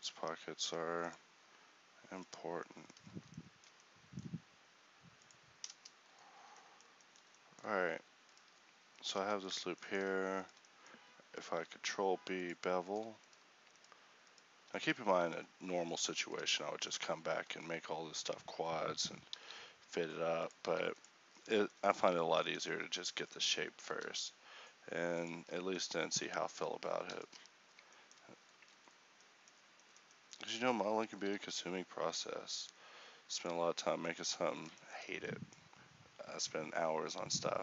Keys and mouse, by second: 6.6-10.7 middle drag, 11.6 ctrl+b, 16.7 middle click, 17.5 KP_1, 19.4 alt+s, 20.7 g, 23.9 ctrl+r, 25.4 Tab, 27.3 KP_1, 28.6 Tab, 30.4 a, 34.8-37.6 middle drag.